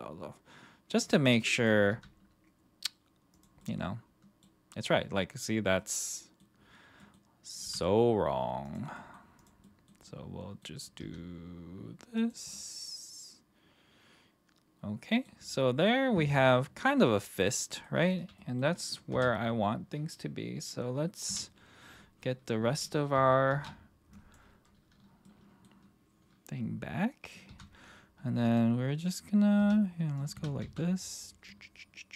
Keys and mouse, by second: 1.0 click, 1.9 r, 3.6-4.4 middle drag, 5.8-6.4 middle drag, 7.0 middle click, 7.6 r, 8.6 click, 8.9 middle drag, 9.4 click, 9.6 middle drag, 10.0-10.6 middle drag, 12.1 click, 12.5-15.2 middle drag, 16.2-17.8 middle drag, 18.0 click, 18.3 middle drag, 19.1 KP_1, 21.3 /, 23.5 alt+h, 24.2 click, 25.2-25.6 middle drag, 27.5 r, 28.5 click, 29.6 r, 30.3 r, 30.6 z.